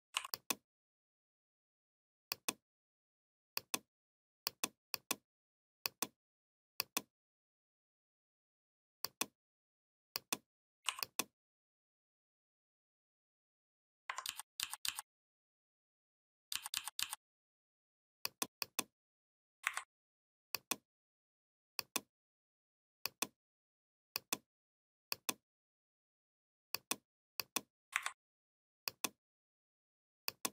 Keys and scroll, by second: 14.1 ctrl+d, 16.4 ctrl+d, 19.5 Delete, 27.8 Delete.